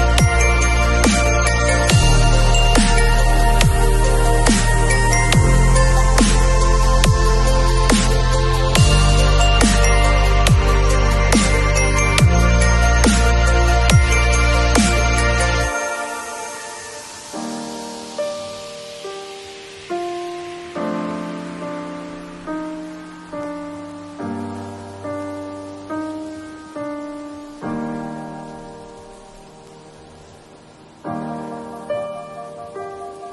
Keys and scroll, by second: 0.0 v, 0.6 space.